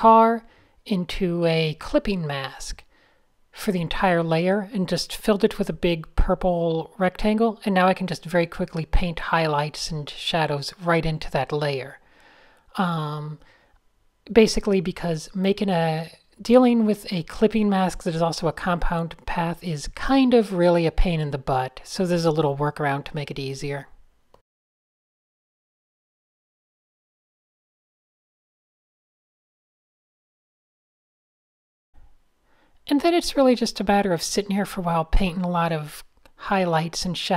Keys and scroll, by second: 0.6 shift+super+a, 2.6 super+z, 3.8 super+z, 6.4 super+z, 6.5 super+z, 6.9 super+z, 7.4 super+z, 9.3 super+z, 12.7-13.6 typing, 15.9 n, 16.5 super+z, 17.0 a, 19.2 super+h, 23.1 alt+shift+super+}, 23.3 alt+shift+super+}, 23.4 alt+shift+super+}, 23.9 alt+shift+super+{, 24.6-28.0 typing, 28.3 super+z, 30.7 a, 31.3 super+h, 31.4 super+space, 32.4 super+z, 33.5 super+-, 34.0 super+z, 34.3 super+-, 34.5 super+-, 36.1 super+space, 36.5 super+z.